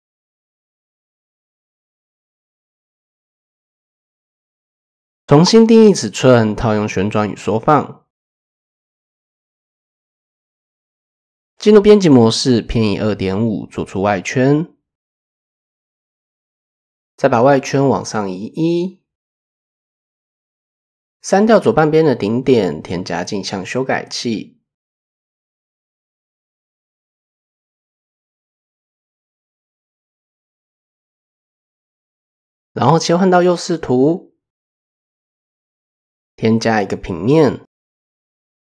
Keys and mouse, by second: 2.2 click, 2.4 click, 3.1 click, 4.6-5.7 drag, 6.5 ctrl+a, 8.0 Tab, 8.6-9.2 drag, 9.7 a, 10.6 ctrl+e, 14.2-15.5 drag, 16.9 click, 18.3 click, 20.9-21.5 drag, 21.5-24.6 typing, 24.7 click, 25.3-26.0 drag, 27.5 shift+click, 29.1 Tab, 30.8 KP_3, 32.5 click, 33.4 shift+drag, 33.6 shift+middle click, 34.2-34.6 shift+middle drag, 36.0 shift+a.